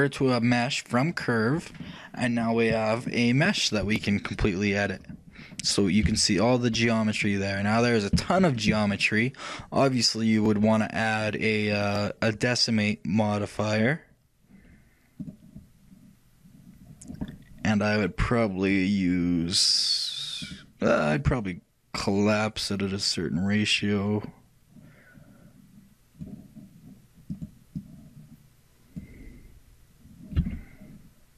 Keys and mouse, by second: 4.0-6.3 drag, 6.0-11.3 middle drag, 6.3 a, 11.3-13.8 drag, 17.4-18.9 middle drag, 18.9-23.8 drag, 27.5-29.6 drag.